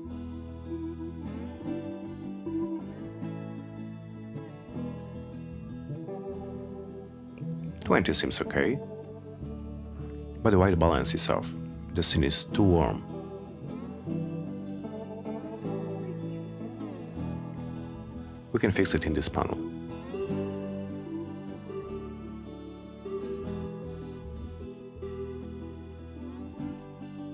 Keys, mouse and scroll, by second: 2.3 2, 2.9 0, 3.5 Return, 22.8 click, 25.9 click.